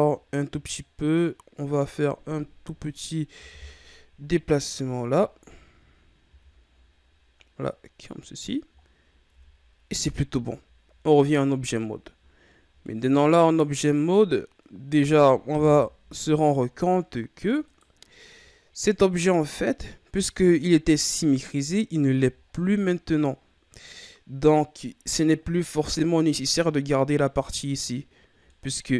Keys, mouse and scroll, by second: 1.7-3.5 drag, 3.5 KP_1, 4.6-5.2 scroll down 4, 5.2-6.2 ctrl+scroll up 5, 6.2 s, 8.8-9.5 ctrl+scroll down 5, 9.5 Tab, 10.2 a, 12.4-12.7 ctrl+scroll down 4, 12.8-15.5 middle drag, 15.5 KP_1, 17.6 right click, 19.0-22.2 ctrl+scroll up 5, 22.4-22.8 ctrl+scroll down 2, 22.8-25.9 middle drag, 28.5-28.9 middle drag.